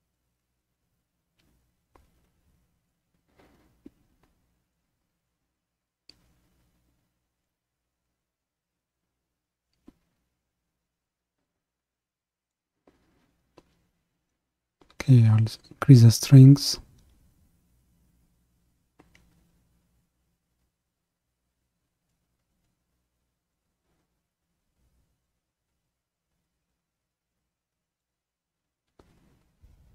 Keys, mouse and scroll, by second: 0.1-2.0 drag, 2.0-2.9 scroll up 2, 2.9-5.0 drag, 5.0-5.5 scroll down 1, 5.5-7.4 middle drag, 7.4-10.5 drag, 13.2-14.4 scroll down 1, 14.4-19.4 drag, 19.7-20.1 scroll down 2, 20.1-22.4 middle drag, 22.4-23.5 scroll up 1, 23.5-28.3 drag, 28.3-28.7 scroll down 1, 28.7-29.9 middle drag.